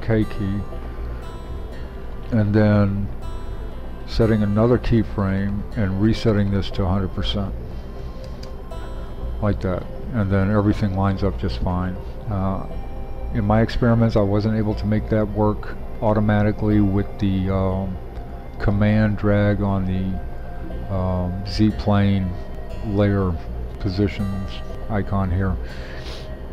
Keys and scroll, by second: 7.9-10.5 typing.